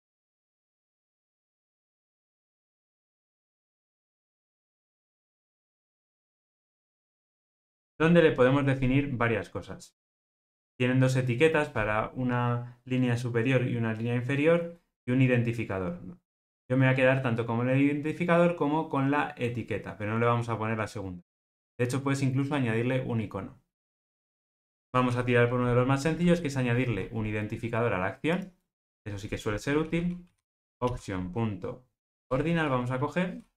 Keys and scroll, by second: 1.2 super+b, 5.3 alt+super+[, 32.1 Return.